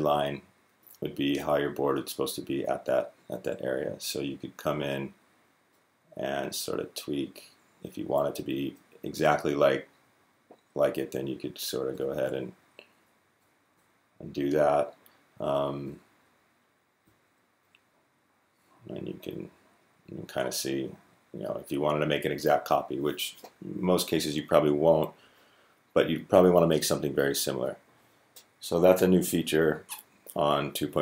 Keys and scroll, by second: 12.6 Up, 12.7 Up, 13.2 Up, 13.5 Up, 14.3 d, 15.1 Up, 15.6 Up, 16.8 d, 17.4 Left, 17.6 Left, 17.8 Left, 17.9 Left, 18.0 Left, 18.2 Left, 18.4 Left, 19.2 s, 19.8 s, 20.4 Down, 20.7 Down, 21.0 Down.